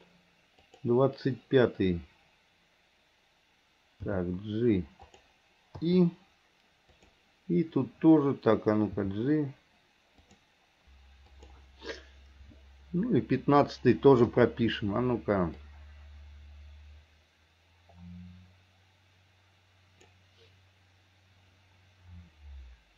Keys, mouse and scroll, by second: 0.7 click, 4.2 g, 5.9 i, 7.0 click, 9.0 g, 11.4 click, 14.3 i, 15.6-20.2 drag.